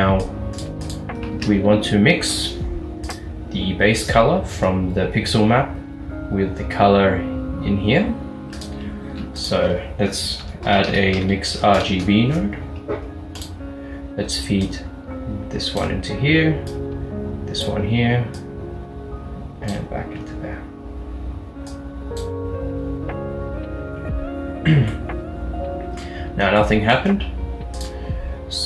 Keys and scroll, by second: 1.4 a, 9.1 a, 10.5-11.7 typing, 12.0 Return.